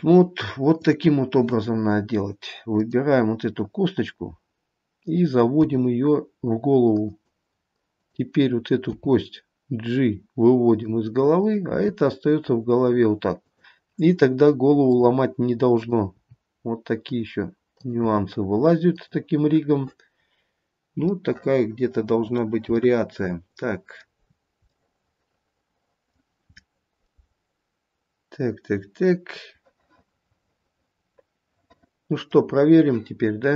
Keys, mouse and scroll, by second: 0.1-0.8 scroll up 2, 1.0 click, 3.0 click, 5.8 g, 8.2 click, 9.1 g, 11.6 click, 12.3 g, 15.1 click, 16.0 click, 16.7 g, 18.0 click, 18.6 g, 20.4-21.0 scroll down 1, 21.0 scroll down 1, 21.3 middle click, 21.7 middle click, 21.9 middle click, 22.4 middle click, 23.0 middle click, 24.5-25.0 scroll down 2, 25.0 middle click, 25.4 middle click, 26.1 middle click, 26.8 middle click, 27.2 middle click, 30.6 middle click.